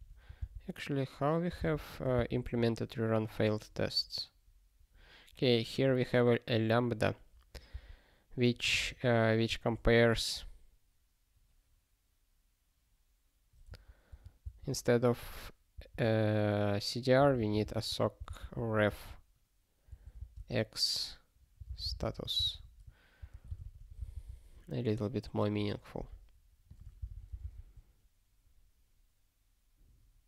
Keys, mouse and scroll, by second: 3.8 scroll down 1, 5.7 click, 7.7 alt+b, 10.2 alt+f, 13.6 alt+f, 14.4 alt+b, 15.7 alt+d, 16.9-18.4 typing, 19.9 ctrl+f, 20.2 space, 20.3 ', 22.5 ctrl+s, 23.2 ctrl+n, 23.7 ctrl+s, 24.0 super+b, 26.7 click.